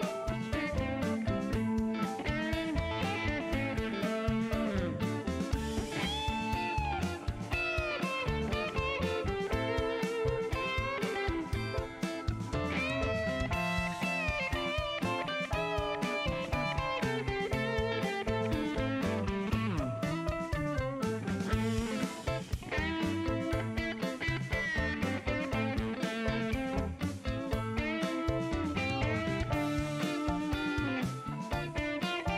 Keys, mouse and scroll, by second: 1.4 shift+middle click, 1.7 shift+right click, 4.0 click, 5.2 click, 6.4 click, 6.8 space, 7.1 right click, 7.6 click, 8.6 scroll up 1, 9.8 click, 10.7 click, 12.7 middle click, 15.3 click, 15.7 click, 16.3 click, 22.7 click, 24.2 click, 24.9 shift+right click, 26.9 click, 27.9 middle click, 28.3-28.6 scroll up 4, 28.9 middle click.